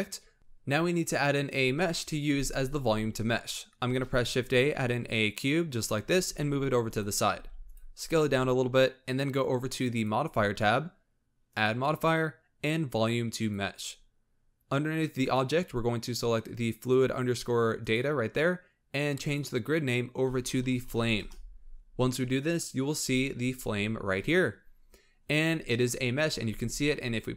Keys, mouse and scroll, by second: 0.3 scroll down 1, 3.9 shift+a, 6.1 g, 7.3 s, 9.8 click, 11.4-14.5 drag, 15.1-18.2 drag, 19.1-22.3 drag, 25.1-25.7 scroll up 3, 25.7-26.0 shift+middle drag, 26.0-26.5 scroll up 3, 26.5 space.